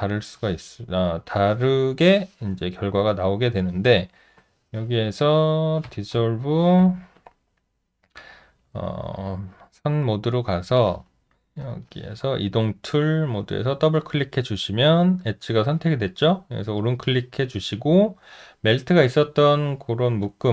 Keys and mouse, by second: 5.9 w, 6.8 4, 14.7 alt+middle click, 15.1 alt+right click.